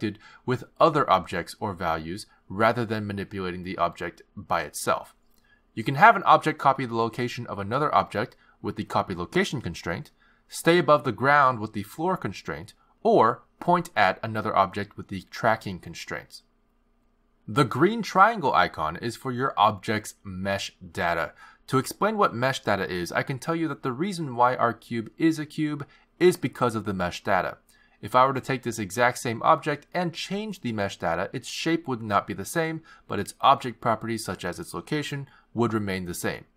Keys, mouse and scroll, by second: 0.3 click, 2.3 click, 6.5 click, 7.0 click, 7.4 click, 8.2 click, 9.1 click, 13.1 click, 14.2 click, 14.7 click, 16.5 click, 18.3 click, 23.9 shift+a, 27.1 g, 29.0 click, 30.4 click, 34.1 click.